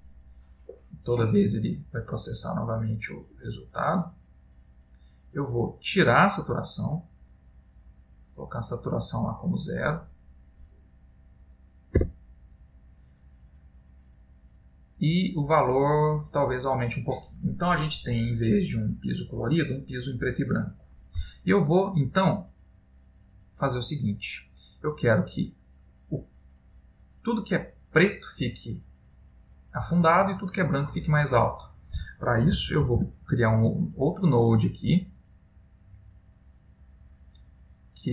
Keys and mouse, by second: 4.0 click, 6.2 click, 10.5 click, 15.1-16.7 click, 15.9 click, 16.4 click, 16.6 click, 17.4 middle click, 19.2 middle click, 22.6 middle click, 23.9 click, 24.8 middle click, 33.0 shift+a.